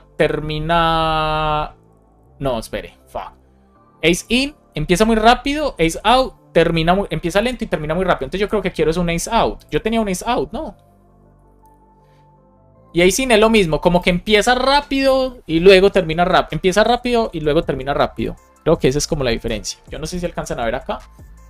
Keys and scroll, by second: 19.3 super+s.